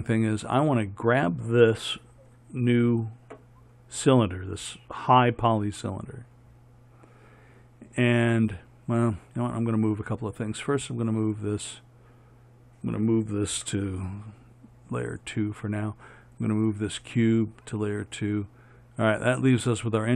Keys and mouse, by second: 7.4-13.8 right drag, 13.8 m, 16.6 right click, 17.1 m.